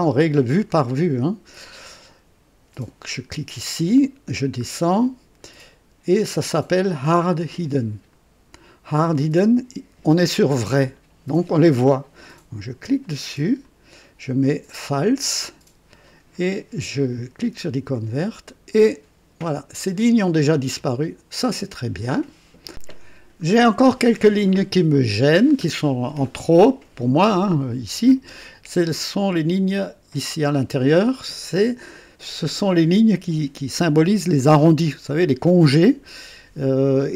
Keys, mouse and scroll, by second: 3.8-4.5 scroll down 2, 6.9-8.3 drag, 12.8 click, 13.6 click, 15.2 click, 17.5 click, 22.7 click, 23.4 scroll up 1, 24.2 scroll up 1, 24.9-25.8 middle drag, 26.3-26.7 scroll up 2.